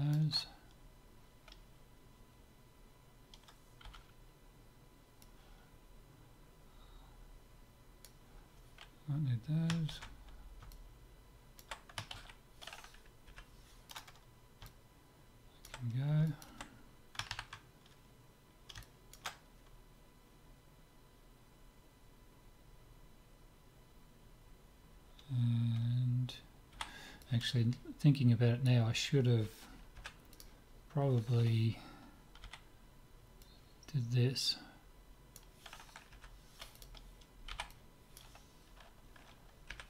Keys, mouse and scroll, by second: 3.9 b, 9.9 ctrl+x, 10.7-12.8 middle drag, 12.2 ctrl+z, 13.3 Delete, 14.7-17.3 middle drag, 18.4-20.6 middle drag, 26.8 b, 30.0 Delete, 32.4 b, 36.1 Delete, 37.5 b, 39.7 Delete.